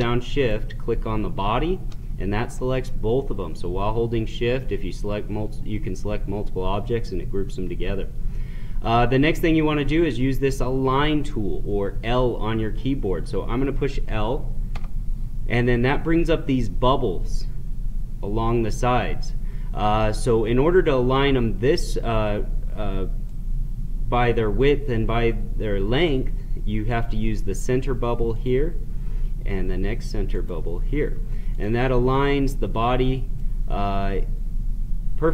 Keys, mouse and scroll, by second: 0.3 shift+click, 14.7 l, 23.3-27.1 right drag, 28.4 click.